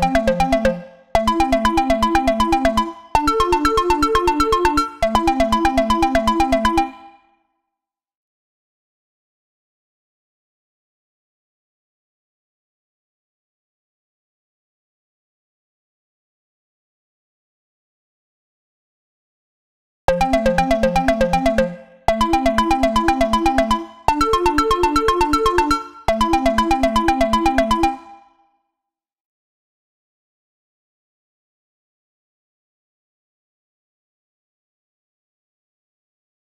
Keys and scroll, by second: 6.9 space, 9.7 Return, 18.0 super+w, 27.9 space.